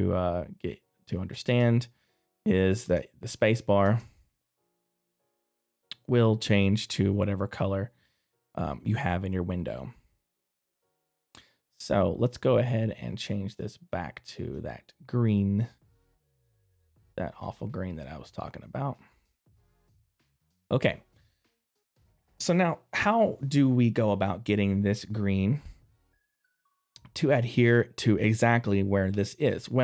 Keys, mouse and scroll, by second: 5.3 right click, 5.3 middle click, 5.3 space, 10.1 middle click, 12.1 click, 19.6 middle click, 19.6 click, 20.5 right click, 21.6 middle click, 21.6 right click, 26.8 click.